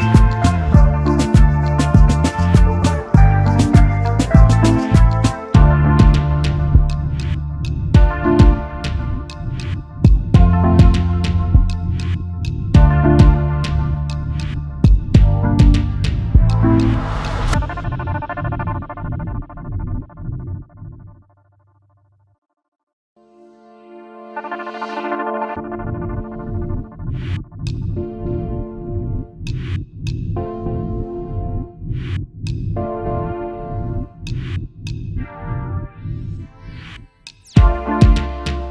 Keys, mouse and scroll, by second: 0.2 double click, 9.1-9.5 alt+scroll down 1, 11.9 space, 12.4 alt+scroll up 1, 13.7 Delete, 15.6 alt+scroll up 1, 19.0 space, 19.0 double click, 22.2 double click, 22.6 alt+scroll down 1, 23.9-24.7 alt+scroll up 1, 24.8 alt+scroll up 1, 25.2 space, 25.3 double click, 25.6 space, 31.8-32.2 alt+scroll down 1, 32.4 space, 32.5 double click, 32.8 space, 35.0-35.4 alt+scroll up 1, 35.6 space.